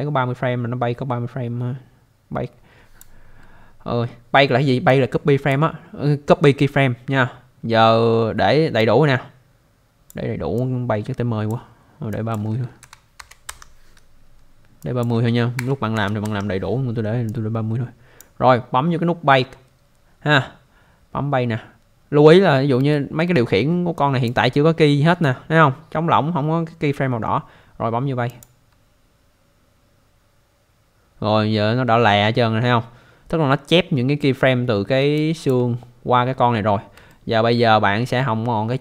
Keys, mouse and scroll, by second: 4.9 click, 8.8 click, 10.6 click, 12.1 click, 12.8-13.2 typing, 13.5 Return, 14.8 click, 15.6-15.9 typing, 16.2 Return, 17.3 click, 22.4-22.8 scroll up 1, 22.9 alt+middle click, 24.0 click, 25.2 scroll down 1, 26.9 scroll down 1, 28.4 click, 31.4-31.9 scroll down 1, 35.1 alt+click, 37.1 alt+middle click, 38.1 scroll down 1.